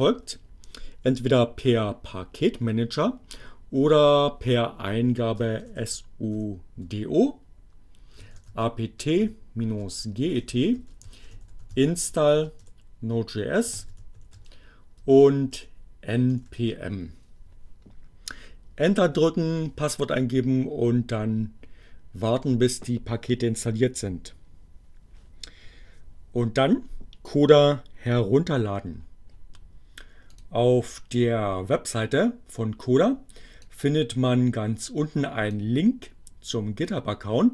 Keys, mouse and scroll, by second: 5.2-7.0 typing, 8.1-15.1 typing, 16.1-17.0 typing, 20.7 BackSpace, 30.3 click, 33.6-35.0 drag, 37.4 click.